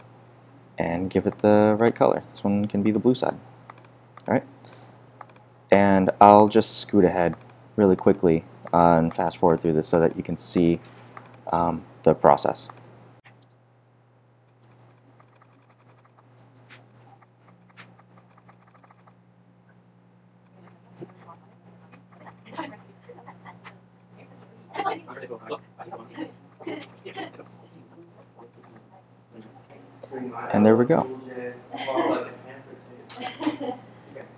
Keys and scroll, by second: 24.1 z.